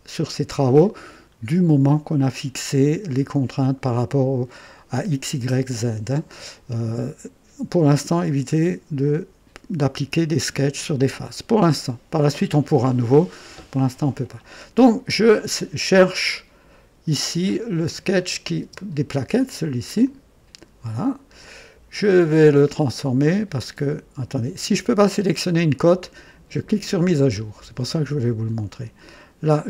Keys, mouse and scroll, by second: 17.4 click, 18.2 click, 18.6 space, 19.8 click, 21.0 scroll up 1, 21.4-22.3 right drag, 25.4 click, 26.8 click.